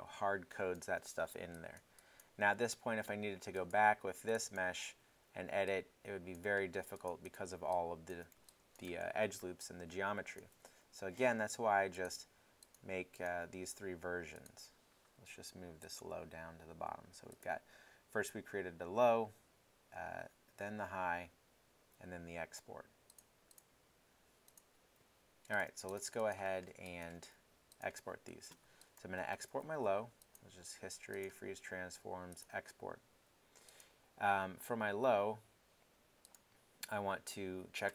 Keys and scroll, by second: 4.9 w, 6.5 z.